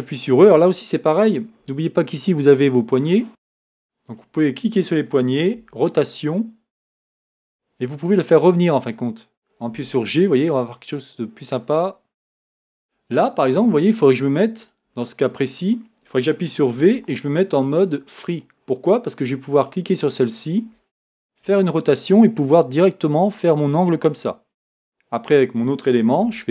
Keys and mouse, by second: 4.1-7.3 right drag, 5.5 r, 8.8 click, 9.7 g, 16.8 v, 21.4 r, 26.2 r.